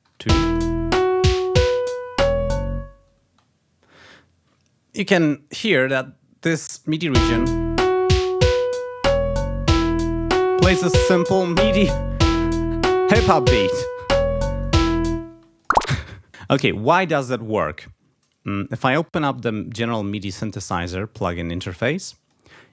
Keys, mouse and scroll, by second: 0.2 alt+space, 3.1 space, 6.4 ], 7.1 l, 15.1 space, 15.4 click, 18.8 click, 21.2-22.3 drag.